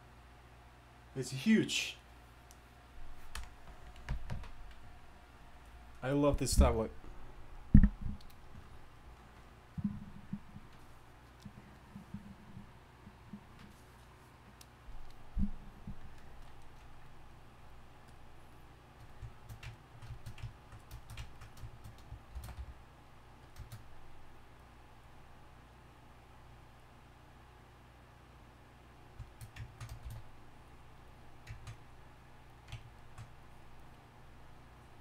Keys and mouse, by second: 18.6-19.9 drag, 18.6-19.1 right drag, 19.9-22.3 middle drag, 22.3 shift+c, 22.6 f, 24.6-30.1 drag, 30.0 shift+s, 30.7-33.0 drag.